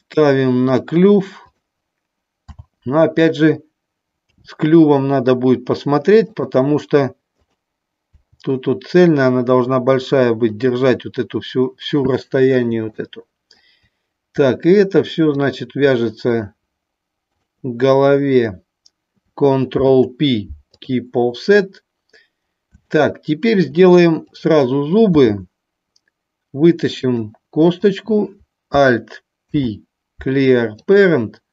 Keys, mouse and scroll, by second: 1.5 click, 4.3 g, 6.3 click, 7.3 click, 10.4 click, 10.4 g, 20.0 ctrl+p, 24.3 click, 26.9 click, 27.7 click, 29.4 alt+p.